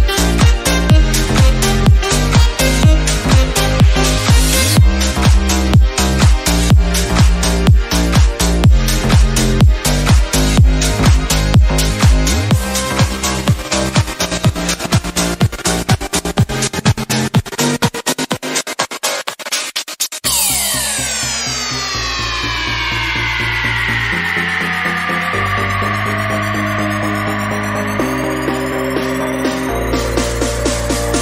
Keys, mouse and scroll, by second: 0.2 s, 0.6 g, 1.2 shift+middle click, 1.4-2.0 scroll up 1, 2.0 r, 3.3-3.7 middle drag, 3.7 scroll up 1, 3.8-4.4 shift+middle drag, 4.4 g, 4.8 middle click, 5.5 s, 5.9 shift+middle click, 6.2 shift+d, 7.3 KP_7, 7.5 scroll up 1, 7.6 shift+middle click, 7.9 r, 8.8 r, 10.2 click, 11.1 r, 12.0 g, 13.5-14.0 drag, 14.5-14.9 middle drag, 14.9-15.5 scroll down 3, 15.5 KP_7, 15.7 scroll up 2, 15.8 shift+middle click, 16.2 shift+d, 17.6 r, 18.3 click, 18.9 r, 19.8-20.3 middle drag, 20.3 scroll down 3, 20.4 click, 20.5-22.3 middle drag, 22.3 click, 22.5 middle click, 23.4 click, 23.5-24.3 scroll up 2, 24.3-24.6 scroll down 1, 24.6 click, 28.0 scroll down 2, 28.1-28.8 middle drag, 28.8 shift+a.